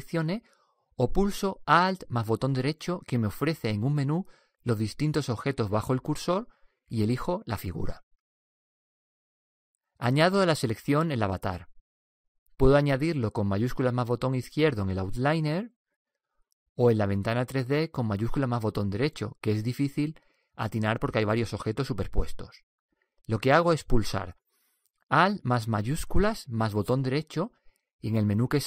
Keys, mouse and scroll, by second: 0.6-5.9 right drag.